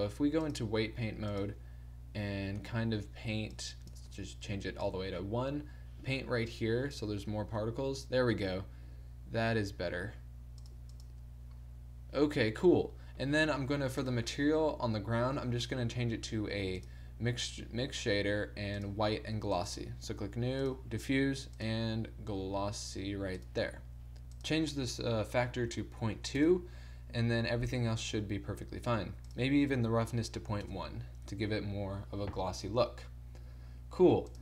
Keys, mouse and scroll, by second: 2.6 t, 3.6-5.8 drag, 4.1 t, 8.2-10.2 middle drag, 10.8 click, 11.5-13.0 middle drag, 28.3 middle click.